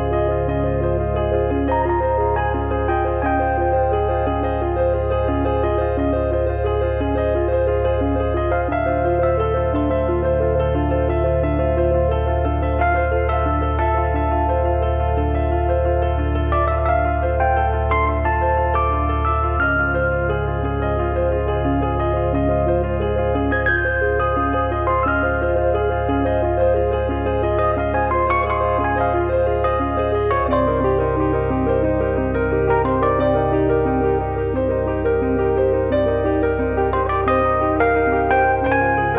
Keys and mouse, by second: 1.3 middle click, 3.2 alt+z, 3.3 middle click, 4.4 click, 4.6 click, 8.7 click, 8.8 middle click, 9.6 click, 9.9 alt+z, 10.1 middle click, 10.5 click, 11.3 click, 12.1 click, 13.0 click, 15.2 f, 15.5 click, 16.3 KP_3, 17.4 click, 18.1 click, 19.6 click, 21.1 click, 21.7 click, 23.9 click, 25.1 click, 26.4 click, 26.5 middle click, 27.2 alt+z, 27.4 middle click, 27.9 middle click, 28.1 middle click, 28.8 alt+z, 28.9 middle click, 29.4 middle click, 29.9 middle click, 30.6 click, 31.7 e, 32.7 click, 32.9 middle click, 33.4 click, 34.4 click, 34.9 middle click, 35.3 click, 37.1 click, 37.7 click, 38.2 e.